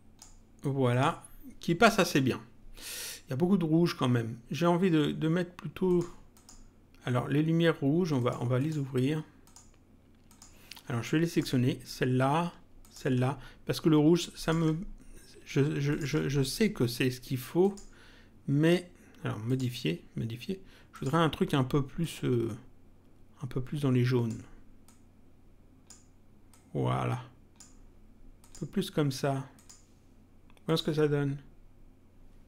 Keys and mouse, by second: 0.9 click, 5.8 click, 8.2 click, 11.3 click, 12.8 ctrl+click, 14.4 ctrl+click, 15.8 ctrl+click, 17.6 click, 19.4 click, 20.9 click, 22.0 click, 24.8 click, 26.5 click, 28.3 click, 29.5 click, 30.6 click.